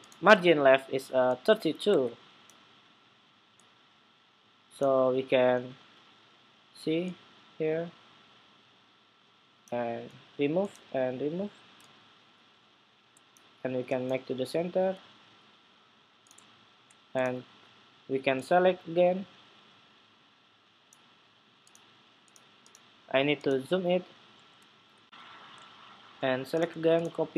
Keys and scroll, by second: 1.6 super+Tab, 24.6 shift+super+2, 26.9 super+c.